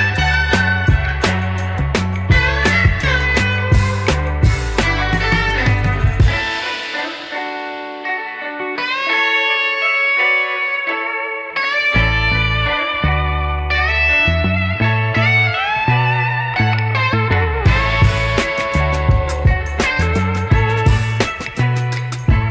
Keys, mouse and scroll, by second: 2.4 click, 3.1 Tab, 4.2-4.6 shift+middle drag, 5.1 drag, 5.7 g, 8.7 click, 9.3 Tab, 9.9 click, 10.8 g, 12.5 Tab, 12.8 click, 13.8 click, 14.3-15.0 scroll down 5, 15.0 shift+middle drag, 15.5 middle click, 16.1-16.8 middle drag, 17.3 middle click, 17.8 KP_1, 18.6 click, 18.7 Tab, 19.0-19.4 scroll up 3, 19.7 scroll down 1, 19.7 scroll down 1, 19.9 shift+middle click, 22.4 alt+click.